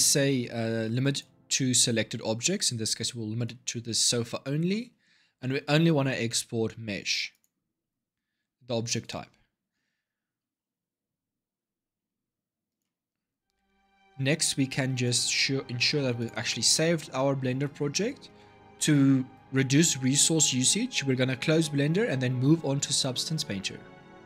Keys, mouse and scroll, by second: 14.8-17.8 drag.